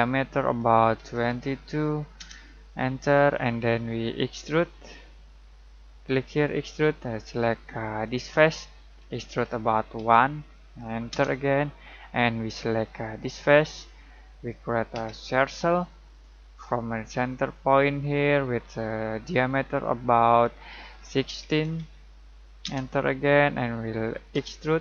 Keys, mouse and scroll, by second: 1.0 typing, 2.2 Return, 4.8 typing, 6.3 click, 6.4-7.1 typing, 9.7-10.5 typing, 11.1 Return, 13.2 click, 14.9 c, 17.5 click, 18.9 typing, 20.4-22.9 typing, 24.3 typing.